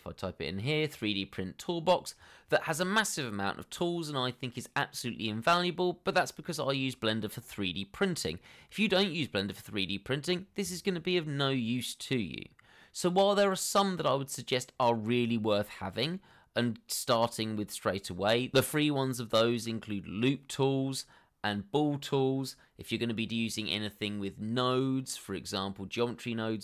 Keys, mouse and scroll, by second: 0.5 3, 1.1 d.